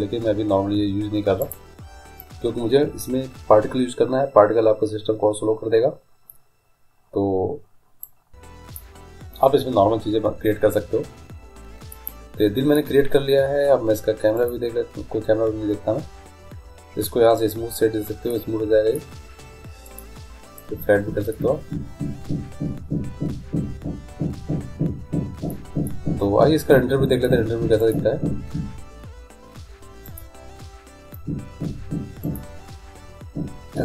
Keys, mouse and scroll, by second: 1.6-3.3 drag, 8.2-10.0 drag, 12.1 middle click, 15.1-16.4 drag, 17.7-19.2 drag, 19.2 middle click, 20.0-21.8 drag, 21.8 middle click, 23.4-25.9 middle drag, 27.3-29.2 drag, 30.3-32.0 drag, 32.5-33.8 drag.